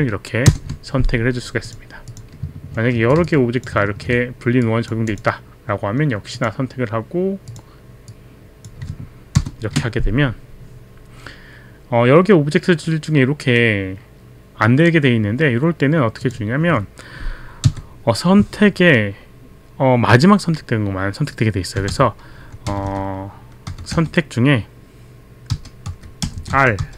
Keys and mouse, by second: 0.5 ctrl+Return, 1.7 click, 2.0 click, 2.9 ctrl+d, 3.2 click, 3.9 ctrl+d, 4.1 click, 4.6 ctrl+d, 4.6 click, 5.1 click, 6.3 click, 7.5 click, 8.0 click, 9.3 ctrl+Return, 16.2 click, 21.9-24.6 typing, 25.9 r, 26.2 BackSpace, 26.4 BackSpace, 26.5 r.